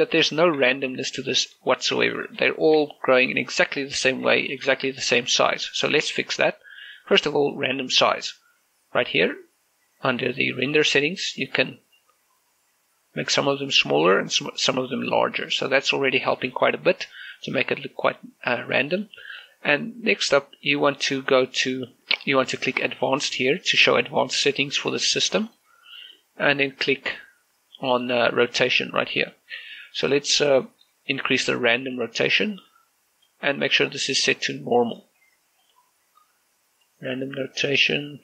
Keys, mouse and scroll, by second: 0.7 click, 1.6 middle click, 1.8 scroll up 1, 2.5 shift+middle click, 2.7 shift+middle click, 3.0 scroll up 1, 3.3 shift+middle click, 3.5 shift+middle click, 3.7 middle click, 4.2 scroll up 1, 5.2 shift+middle click, 10.0-12.1 drag, 12.1-17.7 drag, 17.7-19.6 middle drag, 20.1 scroll up 1, 26.3 click, 27.4 scroll down 1, 29.6 click, 30.3-31.1 scroll down 1, 32.0-38.2 drag.